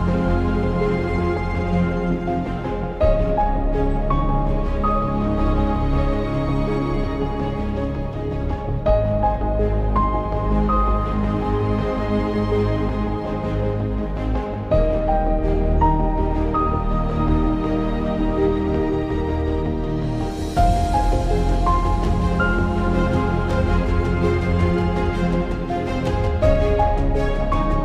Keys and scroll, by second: 5.4 ctrl+i, 12.9-14.5 typing.